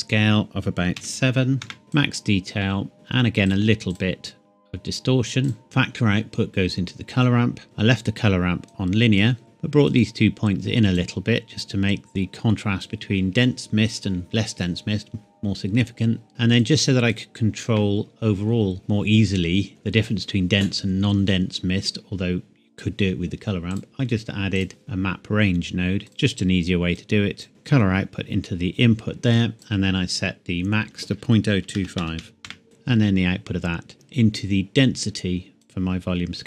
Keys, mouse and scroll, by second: 1.0 KP_7, 1.6 KP_Enter, 2.0 click, 8.6 click, 9.4-9.9 scroll up 1, 9.9 click, 10.0 click, 16.3 click, 18.8 middle click, 19.5-20.7 scroll up 1, 23.7 click, 29.6 click, 31.5 KP_Decimal, 31.8 KP_0, 32.0 KP_2, 32.2 KP_5, 32.4 KP_Enter, 32.7 click.